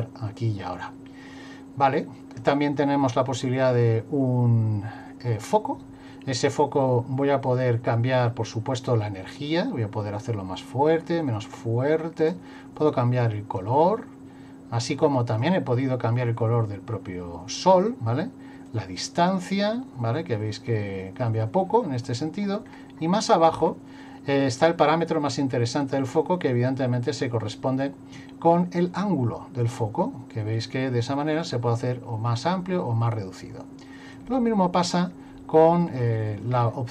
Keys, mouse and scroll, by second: 3.6 click, 8.8 click, 12.8 click, 18.7 click, 22.6-23.3 scroll down 6, 25.8 click, 29.0 click, 34.3 click, 35.9 middle click.